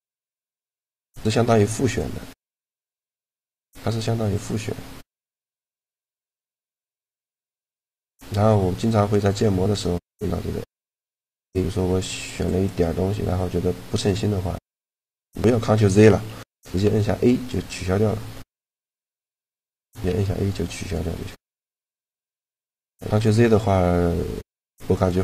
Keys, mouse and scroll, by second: 0.2 b, 1.3 b, 2.1 b, 2.8-5.6 b, 4.1-5.8 drag, 8.0 a, 12.1 b, 16.5 a, 18.8 b, 19.7 a, 24.7-25.2 drag.